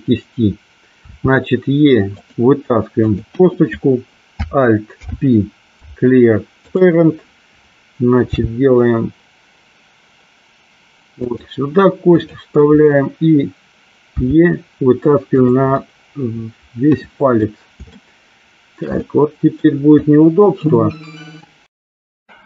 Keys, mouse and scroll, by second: 1.3 e, 2.4 click, 3.1 click, 5.0 alt+p, 8.4 g, 11.4 click, 12.1 click, 14.3 e, 15.5 click, 16.0-17.5 middle drag, 18.1 shift+middle click, 19.3 middle click, 20.3 click.